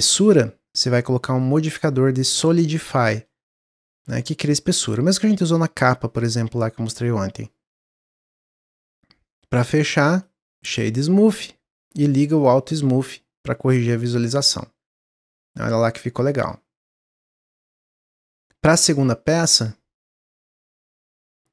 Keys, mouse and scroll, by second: 0.6 drag, 2.9-7.2 drag, 8.7-10.0 middle drag, 10.0-11.7 right drag, 11.7-12.3 scroll down 2, 12.3 click, 12.9 scroll down 1, 13.6 scroll down 3, 13.6 click, 14.2-14.5 drag, 14.5-16.5 middle drag, 16.5-16.9 scroll down 2, 16.9-18.9 middle drag, 18.9-21.5 drag.